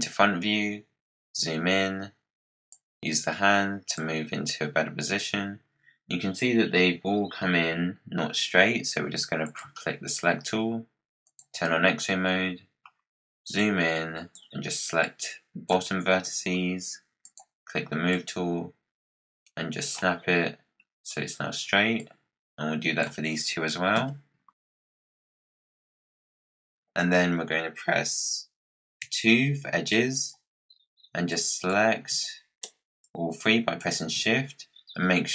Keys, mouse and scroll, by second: 0.3-2.6 scroll up 9, 2.6-4.2 drag, 4.2 scroll down 4, 4.5-7.5 scroll up 1, 9.4-11.8 drag, 11.8-13.5 scroll up 6, 13.5-15.0 drag, 17.1 click, 20.6-21.2 scroll down 7, 21.9 click, 23.9 KP_Decimal, 24.5-25.3 scroll down 22, 24.8 click, 25.8 click, 26.1 click, 26.5 scroll down 5, 26.5 scroll up 1, 28.9 2, 29.8 click, 31.2 shift+click, 32.9 shift+click.